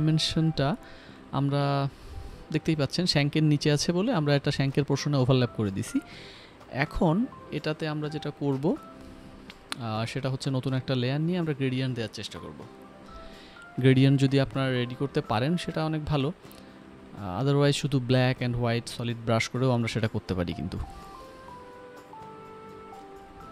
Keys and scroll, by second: 2.0 ctrl+Return, 3.2 ctrl+alt+d, 5.4 5, 6.5 typing, 6.9 Return, 11.4-12.3 typing, 13.6-14.7 typing, 17.0-19.3 typing, 20.0 ctrl+z, 20.7 g.